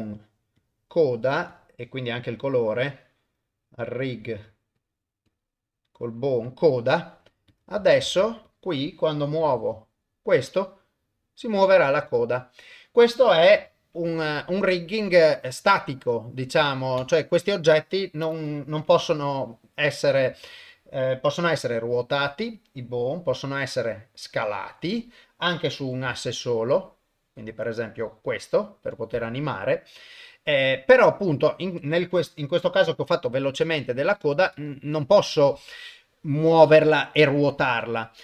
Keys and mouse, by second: 1.5 click, 2.3 click, 4.1-4.9 drag, 5.3-6.6 drag, 7.5 click, 8.0 ctrl+Tab, 8.5 click, 9.5 r, 13.6 r, 16.7 ctrl+middle click, 17.1 shift+middle click, 17.9 click, 19.0 g, 21.5 r, 23.3 s, 25.8 s, 31.5 click, 33.3 r.